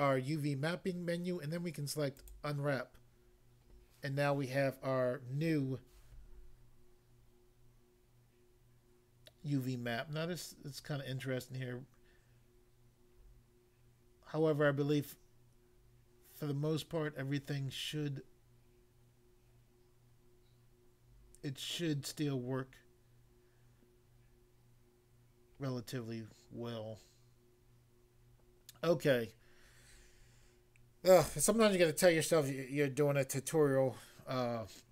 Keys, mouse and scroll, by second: 2.2 click, 13.2 scroll up 1, 14.3 scroll down 1.